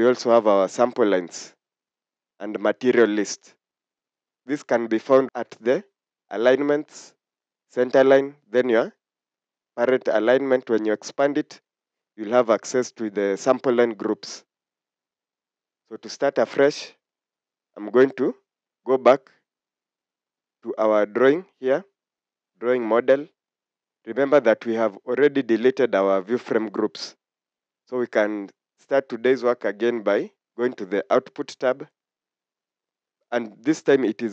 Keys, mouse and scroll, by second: 15.5 scroll down 1, 17.5 scroll up 1, 20.8-21.7 scroll down 1, 21.7 Escape, 23.5 scroll up 1.